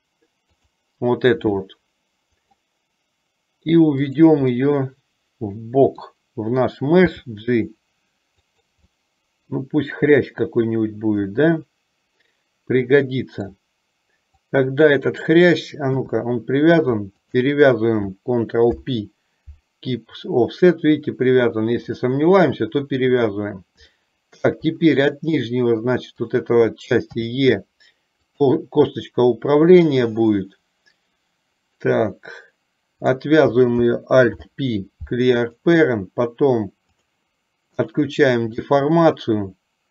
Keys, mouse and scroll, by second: 1.6-2.9 middle drag, 4.2 click, 4.8-6.2 middle drag, 7.2 g, 9.1-13.7 middle drag, 14.6 click, 15.9 KP_3, 17.3 shift+click, 18.8 ctrl+p, 22.1 click, 24.1 shift+middle click, 27.3 e, 33.2 click, 34.4 alt+p, 37.9 click.